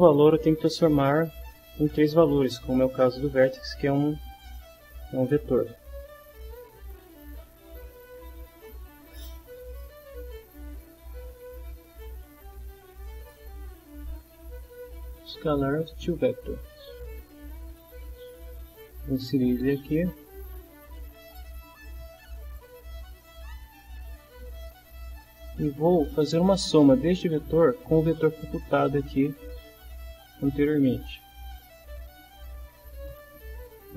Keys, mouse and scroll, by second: 6.2 right click, 16.3 click, 17.6 click, 19.5-21.2 drag, 22.5-23.5 drag, 29.5 right click.